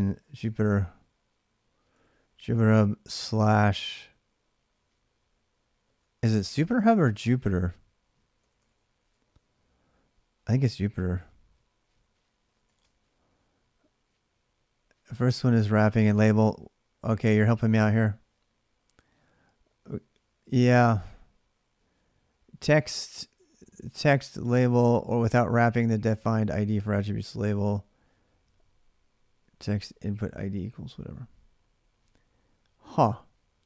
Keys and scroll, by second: 0.0-3.1 typing, 5.8-6.3 typing, 7.9-9.3 typing, 11.0-13.1 typing.